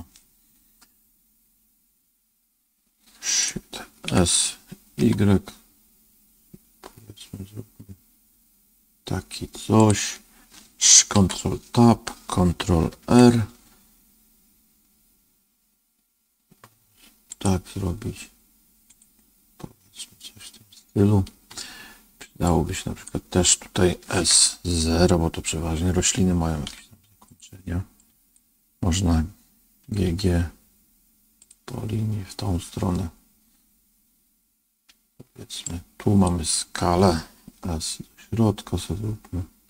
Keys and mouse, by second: 4.0 s, 11.1 ctrl+Tab, 12.9 ctrl+r, 22.5 click, 24.1 s, 27.9 click, 29.8 g, 35.7-37.4 drag, 37.4 s.